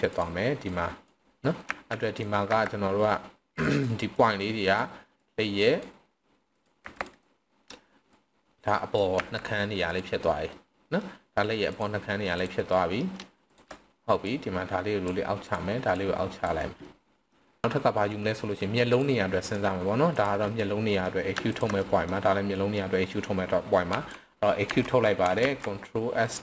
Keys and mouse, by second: 0.1 click, 0.7 click, 1.6 z, 2.1 drag, 2.5 c, 3.7 right click, 4.1-4.8 drag, 5.2 click, 6.6 click, 6.8 c, 7.1 right click, 8.2 click, 9.1 z, 10.5-10.9 middle drag, 11.6 click, 12.3 click, 12.7 middle drag, 13.4 shift+drag, 14.2-15.0 drag, 16.0 click, 16.8-17.3 middle drag, 18.8 click, 20.4 middle click, 21.8 middle drag, 22.5 middle drag, 24.0 e, 24.7 Escape, 25.4 alt+s.